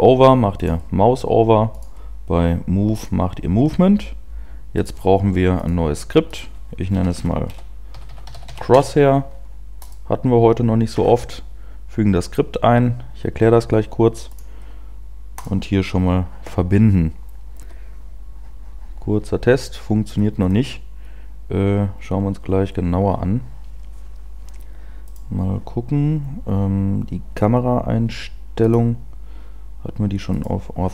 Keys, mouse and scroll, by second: 19.1 p, 20.2-20.9 scroll down 2, 20.3-20.9 scroll up 1, 20.9-21.7 scroll up 2, 21.7 scroll down 1, 25.3 right click, 30.3 click.